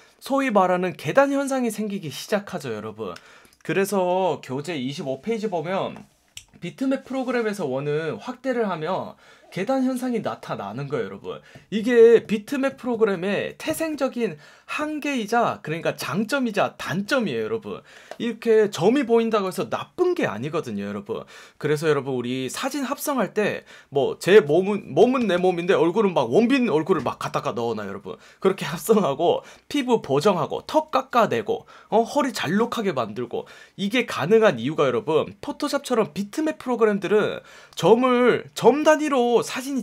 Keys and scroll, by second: 0.3 F1, 3.1 F1.